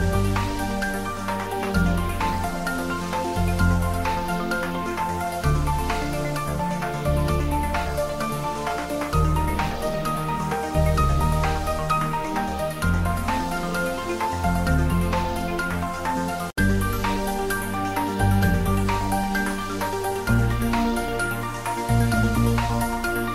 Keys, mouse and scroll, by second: 0.0 s, 0.7 click, 1.1 shift+middle click, 1.4 s, 2.4 click, 2.5-7.4 typing, 3.7 click, 4.8 click, 5.8 click, 10.0-10.9 typing, 11.1 click, 11.4 Tab, 12.0 ctrl+s, 12.6 Tab, 14.8 click, 16.3 click, 17.8-18.2 middle click, 18.1 ctrl+s, 18.4 middle click, 19.3-20.4 drag, 20.6 ctrl+s, 21.0 click, 21.3 Tab, 21.5 click.